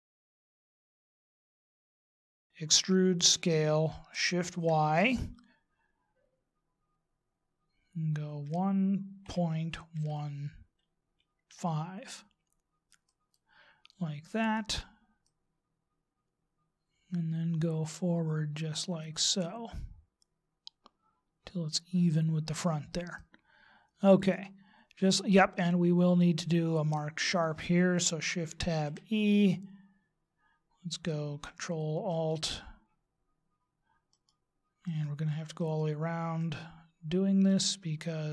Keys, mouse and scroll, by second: 0.2 shift+right click, 0.3 shift+right click, 0.6 shift+right click, 0.8 shift+right click, 1.1 shift+right click, 1.2 shift+right click, 1.6 middle click, 2.6 e, 15.2 click, 23.2 middle click, 28.2 ctrl+Tab, 32.1 alt+shift+right click, 34.1 alt+shift+right click, 34.8 alt+shift+right click, 35.6 alt+shift+right click, 36.4 alt+shift+right click, 37.4 alt+shift+right click.